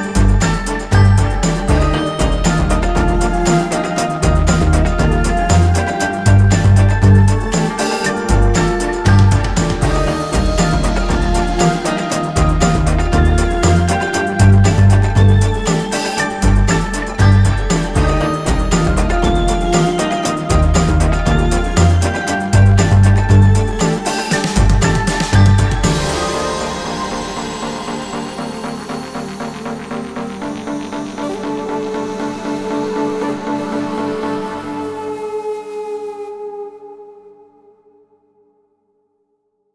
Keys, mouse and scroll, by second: 2.2 typing, 4.9 alt+scroll down 1, 6.2 click, 6.6-6.9 alt+scroll up 1, 7.6 space, 7.9 alt+scroll up 1, 8.2 alt+scroll down 1, 9.6 click, 10.5 ctrl+scroll down 1, 11.8 click, 15.1 click, 26.7 alt+scroll up 1, 28.1 click, 30.3 i, 31.9 click, 34.2 ctrl+click, 34.5 alt+scroll down 1, 34.8 alt+scroll up 1, 35.4 ctrl+click, 38.6 ctrl+click, 39.0 alt+scroll down 1, 39.5 alt+scroll up 1.